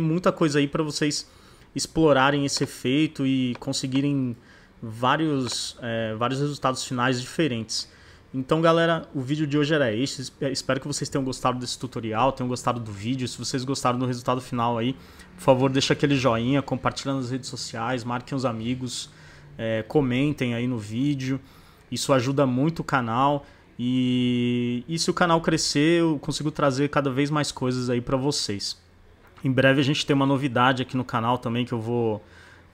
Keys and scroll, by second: 2.0 z, 3.2 space.